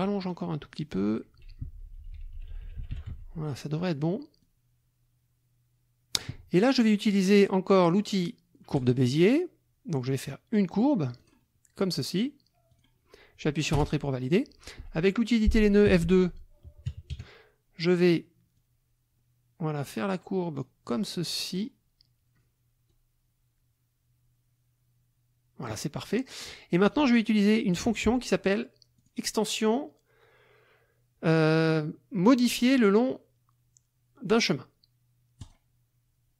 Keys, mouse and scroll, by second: 0.2 click, 0.8 click, 1.6 shift+Left, 3.1 shift+F1, 4.4-6.4 drag, 8.8 click, 11.2 click, 12.7 click, 13.8 Return, 15.9 F2, 16.8 KP_Subtract, 17.1 KP_Add, 18.5-21.1 drag, 21.4 click, 22.9-25.8 drag, 26.4 click, 27.6 shift+click, 29.0 click, 35.4 click.